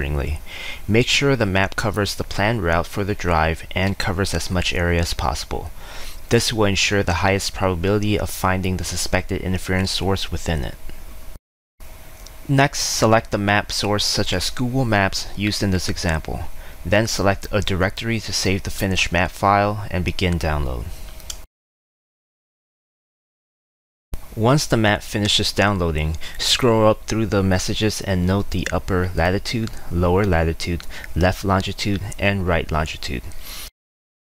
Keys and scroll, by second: 6.6-7.7 typing, 8.7 typing, 33.7-34.3 typing.